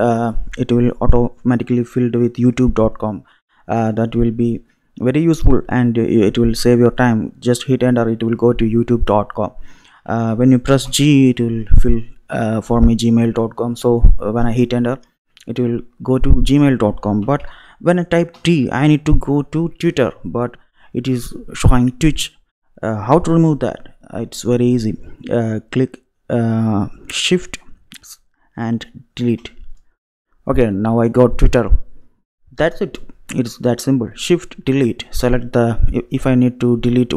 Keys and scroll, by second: 9.9 BackSpace, 10.9 g, 17.2 BackSpace, 18.3 t, 29.3 shift+Delete, 36.6 Down.